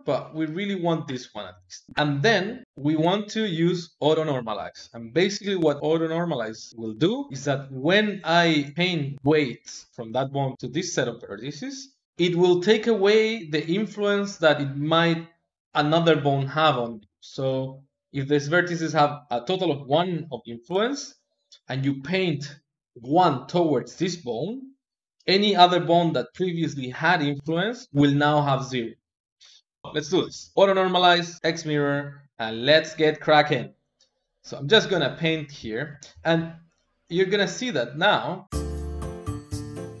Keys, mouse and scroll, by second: 0.1-1.9 drag, 1.9-3.4 shift+middle drag, 6.7 click, 7.1-9.9 middle drag, 11.8 middle click, 29.8-31.4 middle drag, 31.7-32.9 shift+middle drag, 32.9 click, 33.6-35.3 middle drag, 35.3-37.3 drag, 39.3-40.0 shift+middle drag.